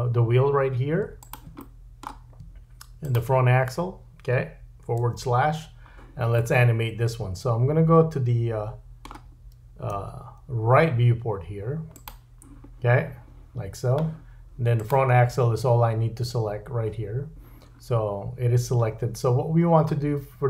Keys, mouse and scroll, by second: 0.2-1.2 middle drag, 1.2 shift+click, 1.3-3.0 shift+middle drag, 3.0 shift+click, 3.2-9.4 shift+middle drag, 5.0 /, 9.9 `, 14.8 click, 14.9-20.4 middle drag, 19.0-20.4 scroll up 4.